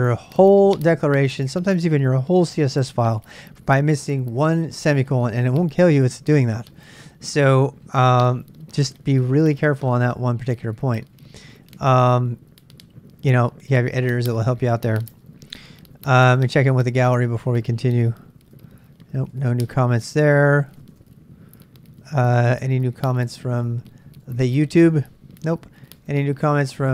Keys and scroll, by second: 15.1 super+Tab, 15.3-17.7 super+Tab, 20.8 super+Tab.